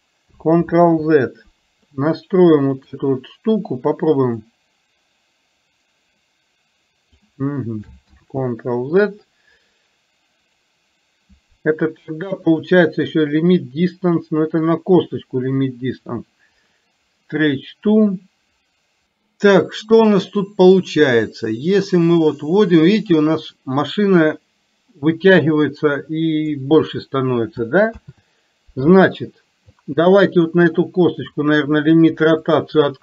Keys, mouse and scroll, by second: 1.0 ctrl+z, 4.6-7.3 drag, 8.3 ctrl+z, 19.1 middle click, 20.9-26.5 drag, 32.5 click.